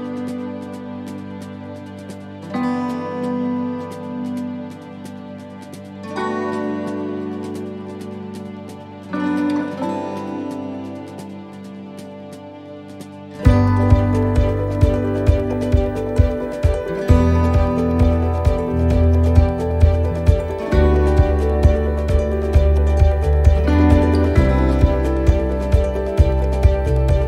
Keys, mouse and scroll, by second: 0.6 middle click, 2.0 c, 7.6 middle click, 8.3 x, 10.1 middle click, 11.1 c, 15.5 c, 16.9 middle click, 23.0 x, 24.2 middle click, 25.2 c.